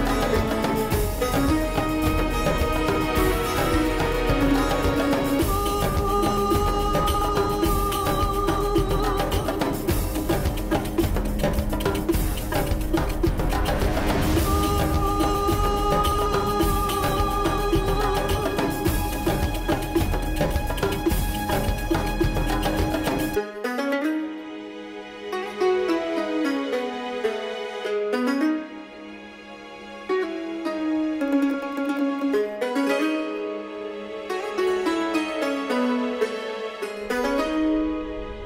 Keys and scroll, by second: 2.5 Tab, 3.5 Tab, 11.8 z, 12.7 Tab, 13.0 g, 13.2 z, 16.0 Tab, 16.2 a, 16.7 Tab, 17.7 Tab, 19.3 ctrl+r, 22.7 Return, 23.2 ctrl+b, 25.5 s, 27.8 Tab, 30.6 Tab, 32.1 1, 32.3 shift+z, 33.3 shift+z, 33.7 g, 36.5 shift+z, 37.5 g.